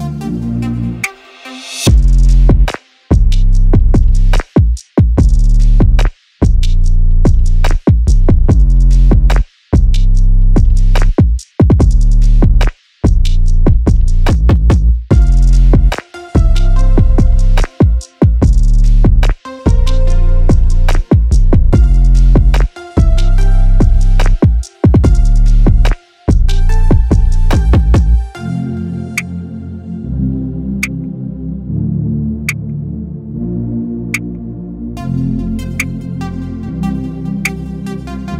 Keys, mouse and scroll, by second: 1.2 click, 1.9 click, 3.9-5.3 right drag, 5.3 click, 7.2 click, 8.5 click, 9.2-10.6 right drag, 10.6 click, 12.1 scroll down 1, 12.7-13.8 drag, 14.3 click, 14.6 click, 14.9-16.2 right drag, 16.2-16.7 scroll down 1, 16.7 click, 17.1-17.6 scroll down 3, 17.6 click, 18.8 scroll up 2, 19.5 click, 20.3-21.1 drag, 21.1-21.6 scroll up 1, 21.6 click, 22.4 click, 23.4-25.8 right drag, 25.8 ctrl+z, 26.4 click.